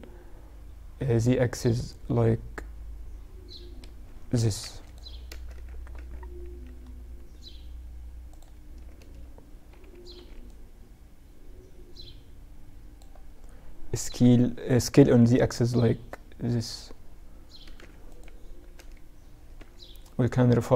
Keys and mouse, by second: 4.5 z, 4.7 z, 5.1 z, 5.8 z, 7.4-9.0 drag, 8.1 a, 9.3 b, 13.2 s, 17.9 a, 18.7 b.